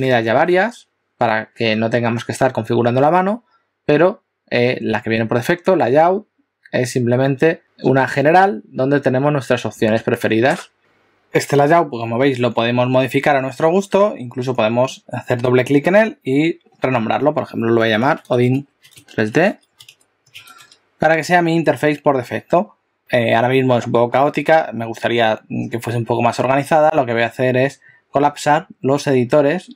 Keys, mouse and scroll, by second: 15.0 click.